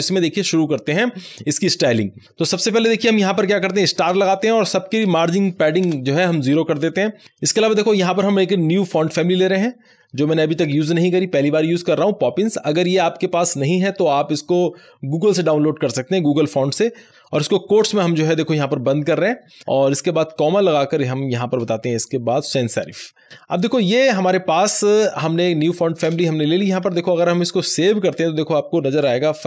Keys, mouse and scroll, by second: 3.7-7.7 typing, 8.7-9.4 typing, 10.4 Down, 11.1 Return, 11.6-14.2 typing, 17.5 BackSpace, 17.7 ., 17.9 Left, 19.5-22.8 typing, 19.7 Right, 22.9 Right, 23.2 Left, 26.1 space, 26.5 Right.